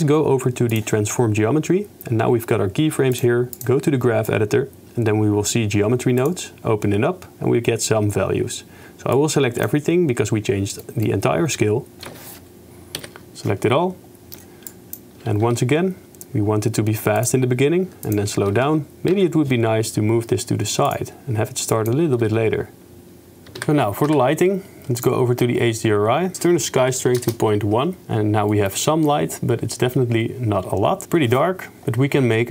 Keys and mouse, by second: 0.7 click, 3.8 click, 6.2 click, 9.3 click, 10.8 click, 12.1 a, 13.0 KP_Decimal, 14.7-15.1 drag, 15.5 g, 17.5 g, 18.1 click, 18.2 g, 18.6 shift+space, 19.4 g, 21.1 g, 22.2 shift+space, 23.6 n, 24.1 n, 26.3 click, 27.7 middle click, 28.6 shift+click, 29.0 click, 29.6 middle click, 31.8 KP_0.